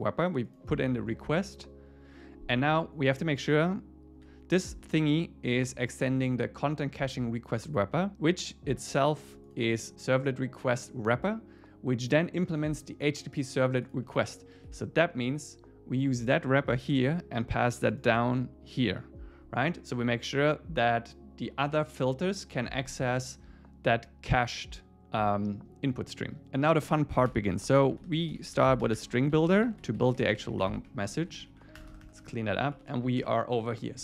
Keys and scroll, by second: 14.7 super+w, 17.0 super+c, 18.2 super+v, 27.3 Return, 31.3 Down, 31.5 super+Right, 31.8 Return, 32.6 Up.